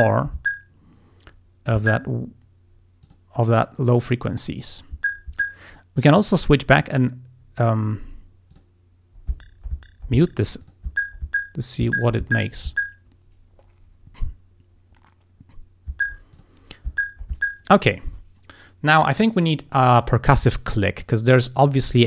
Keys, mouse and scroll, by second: 3.1 click, 6.1 click, 8.6 click, 10.7 click, 16.4 click, 21.1 click.